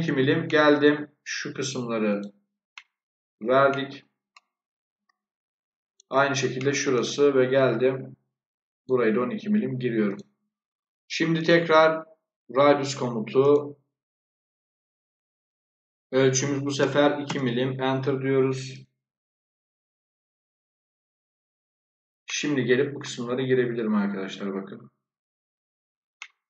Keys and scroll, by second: 16.7 2, 17.2 Return.